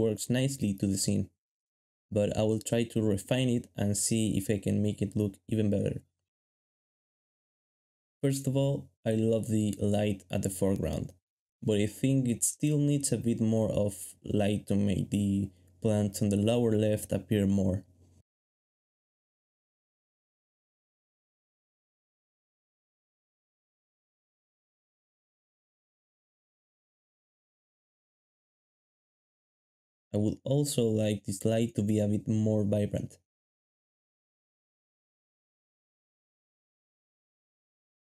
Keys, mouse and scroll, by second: 2.9 shift+middle click, 3.6 shift+middle click, 4.6 g, 6.0-6.7 typing, 9.3 s, 13.5 shift+middle click, 13.7 typing, 15.0 alt+d, 15.4-16.1 typing, 19.2 shift+click, 23.3-24.0 typing, 25.7-26.4 typing, 29.1 shift+middle click.